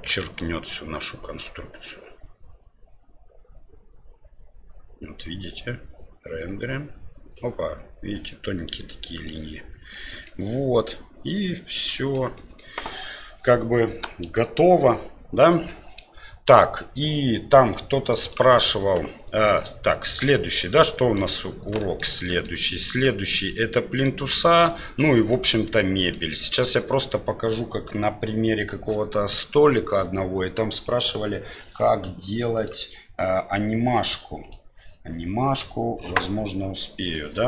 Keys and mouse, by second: 20.6-21.1 middle drag, 21.9 shift+middle click, 22.4 middle click, 22.7 right click, 23.8-24.1 middle drag, 24.5 shift+middle click, 25.4-26.2 middle drag.